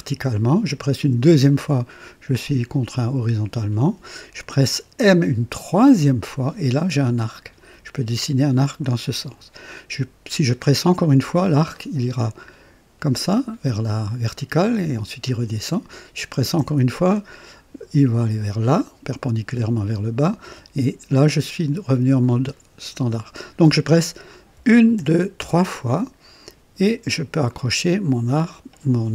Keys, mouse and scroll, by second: 1.1 m, 5.9 m, 11.2 m, 16.7 m, 20.6 m, 24.6-25.4 typing.